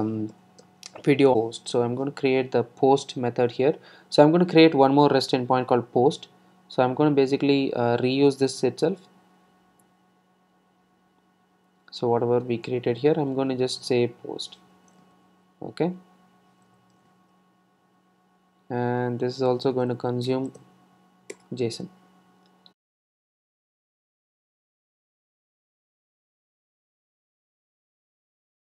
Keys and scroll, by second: 15.5 super+d, 23.8 Return.